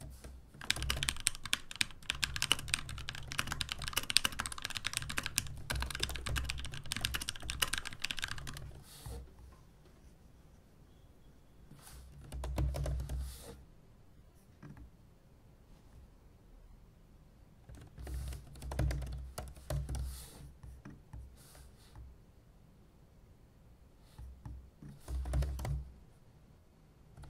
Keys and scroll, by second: 0.5-2.6 typing, 3.8 ctrl+d, 4.1-7.2 typing, 7.5 ctrl+d, 8.3 ctrl+u, 8.4 ctrl+u, 8.6 ctrl+u, 11.8-13.5 typing, 17.7 super+w, 17.8-20.4 typing, 18.0 shift+super+f, 18.2 shift+super+f, 24.8-27.2 typing.